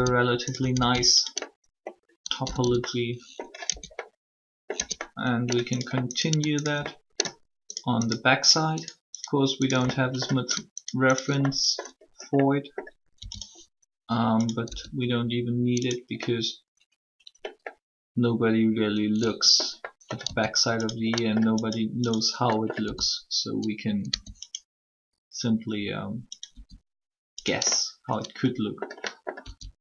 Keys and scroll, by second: 2.4 typing, 3.6 Tab, 4.7 Tab, 13.1 e, 14.6 s, 20.2 s, 22.8 e, 26.5 s, 29.4 s.